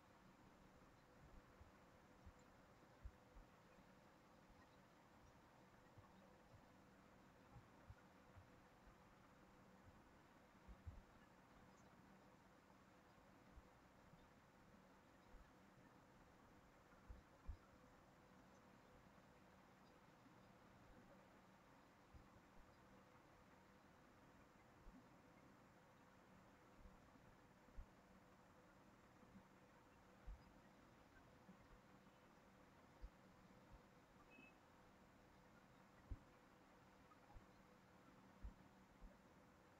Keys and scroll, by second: 9.6 ctrl+c, 9.8 ctrl+v.